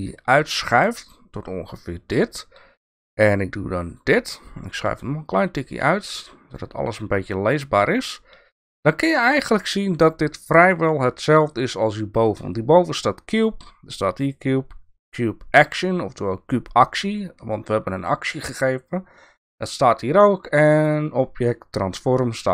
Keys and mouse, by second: 3.9 click, 5.2-6.5 drag.